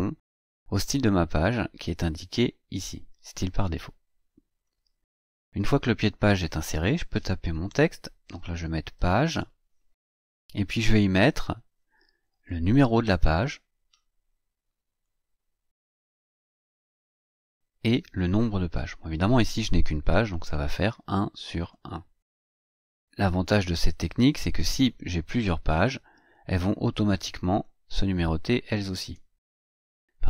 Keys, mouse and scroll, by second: 4.4 click, 7.8-9.3 typing, 14.7 click, 16.8 click, 20.3 click, 21.5 click, 22.9 click, 26.3 click, 27.3 click, 28.8 click.